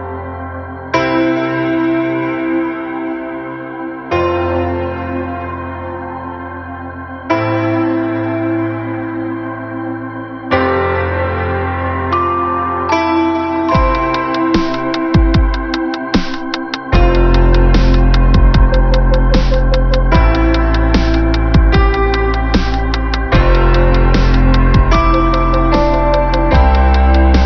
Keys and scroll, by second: 2.8 ctrl+alt+z.